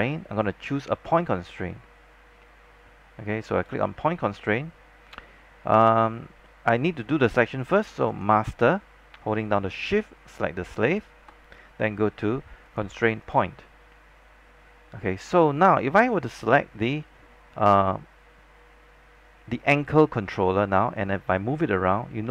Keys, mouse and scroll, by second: 10.9 shift+click, 12.8 click, 15.3-15.8 scroll down 1, 15.8 click, 18.6 scroll down 1, 21.1-22.3 drag.